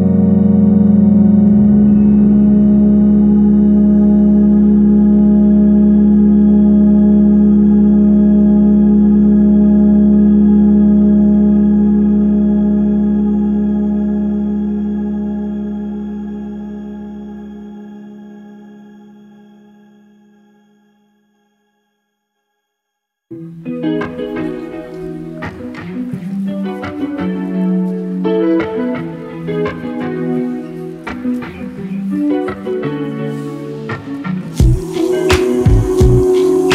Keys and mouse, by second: 1.3 middle click, 3.0-5.4 middle drag, 6.5-8.5 middle drag, 11.4 click, 16.4-17.1 middle drag, 18.2 g, 23.7-24.2 middle drag, 25.9-26.8 middle drag, 29.2-34.3 drag, 34.9-36.7 drag.